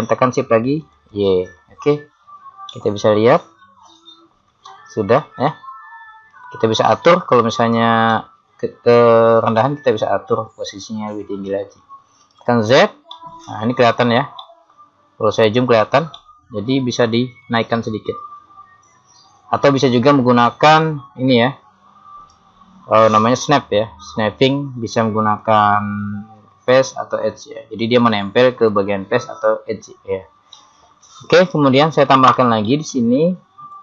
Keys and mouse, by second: 1.0 click, 2.7 middle click, 3.4-4.5 middle drag, 7.6 right click, 8.6-10.3 middle drag, 12.4 z, 13.2 middle click, 14.4 middle click, 17.5 middle click, 18.9 click, 25.4 click, 31.1-33.8 middle drag.